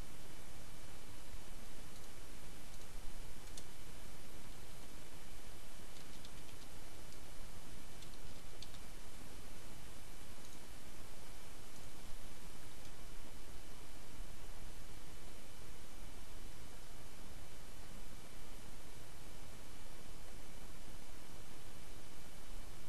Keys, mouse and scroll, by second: 1.9 click, 2.7 click, 2.9 Return, 4.3 space, 4.7 p, 5.8-8.1 typing, 10.4 click, 11.9 click, 12.4 Up, 12.8 Return.